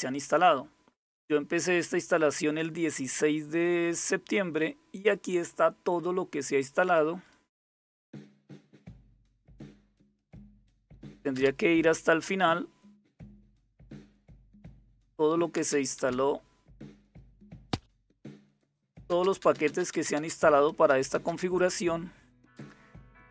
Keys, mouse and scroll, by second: 3.2-5.7 drag, 6.4 click, 7.0-12.7 typing, 14.1 space, 15.1 space, 15.5 space, 16.9 space, 17.5 space, 18.6-23.3 typing.